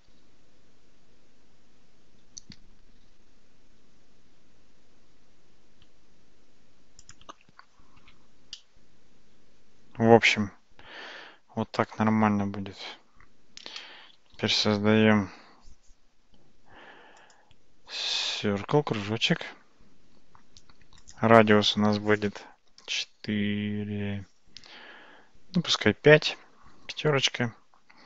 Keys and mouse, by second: 8.0 Tab, 8.6-11.6 middle drag, 14.2 shift+a, 21.0-25.2 drag, 25.2-27.1 right drag.